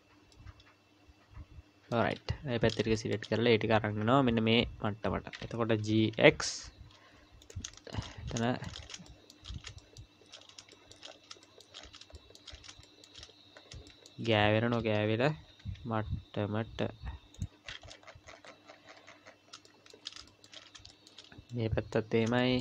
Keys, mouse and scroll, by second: 0.3 middle click, 2.3 KP_1, 3.0 shift+middle click, 3.3-5.3 scroll up 5, 5.8 g, 7.7 shift+middle click, 8.1-9.1 scroll up 8, 8.4 shift+middle click, 9.1 shift+middle click, 9.8 shift+middle click, 10.3-12.0 scroll up 6, 10.7 shift+middle click, 11.4 shift+middle click, 12.1 shift+middle click, 12.5-13.9 scroll up 10, 12.8 shift+middle click, 13.9 shift+middle click, 14.3-14.9 scroll up 2, 14.9-15.2 scroll up 1, 15.3 g, 17.6-19.5 scroll down 48, 19.7 shift+middle click, 20.5 shift+middle click, 20.5-20.9 scroll up 5, 20.9 shift+middle click, 21.5 click, 22.2 scroll up 1, 22.4 shift+middle click.